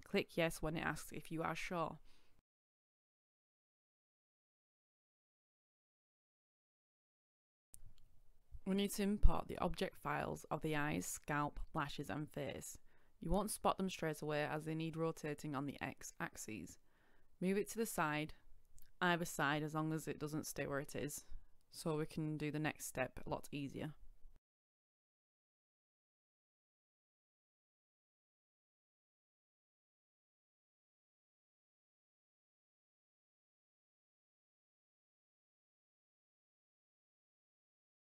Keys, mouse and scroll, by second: 0.6 typing, 1.1 Return, 4.7 click, 8.3 Return, 10.7 click, 11.0 Return, 12.3 click, 12.6 Return, 13.9 click, 14.2 Return, 15.6 KP_Decimal, 16.2-16.6 scroll down 1, 19.3 click, 25.1 KP_9, 26.9 KP_Decimal, 28.3 typing, 31.3 click, 32.4 shift+click, 35.8 click, 37.5 click.